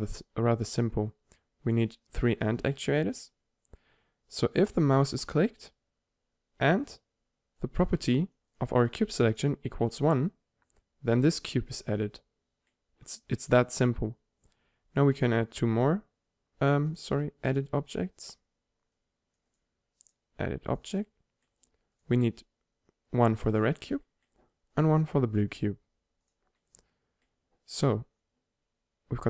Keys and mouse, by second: 5.6-7.0 drag, 11.4-13.8 drag, 15.9-19.4 drag, 21.0-24.0 drag, 24.0 middle click.